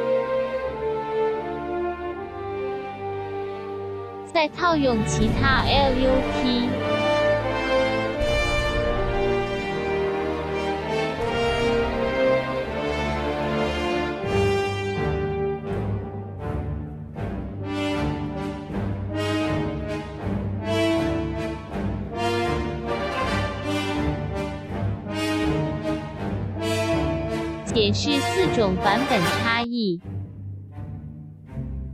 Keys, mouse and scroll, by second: 7.9 click, 12.9 ctrl+y, 13.7 right click, 17.1 click, 19.3 ctrl+y, 20.1 right click, 27.6 click.